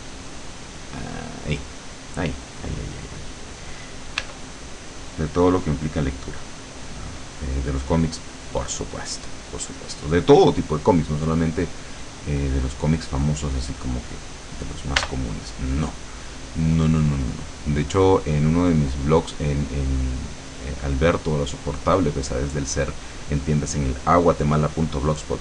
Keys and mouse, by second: 0.6-1.8 drag, 4.3 e, 4.8-6.8 drag, 15.1 b, 17.0-20.0 drag, 20.5 click.